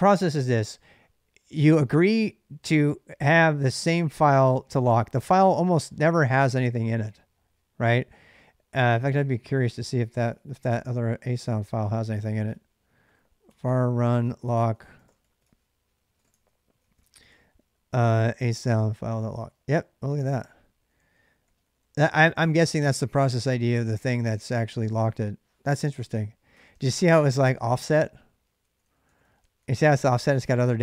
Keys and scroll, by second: 9.0 ctrl+[, 9.1-16.4 typing, 11.1 ctrl+c, 13.4 Tab, 16.6 Tab, 17.6-24.5 typing, 18.5 Return, 26.3 ctrl+[, 26.5-30.8 typing, 26.9 Return.